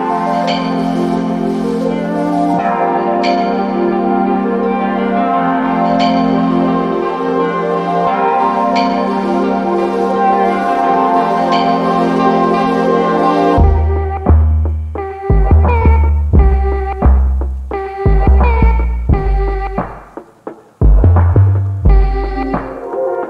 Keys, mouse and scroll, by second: 3.8 alt+middle click, 4.1 alt+click, 6.1 alt+middle click, 14.8 double click, 15.2 scroll down 1, 15.3 scroll up 1, 15.4 scroll down 1, 15.7 alt+click, 21.9 double click, 22.6 click, 23.0 double click.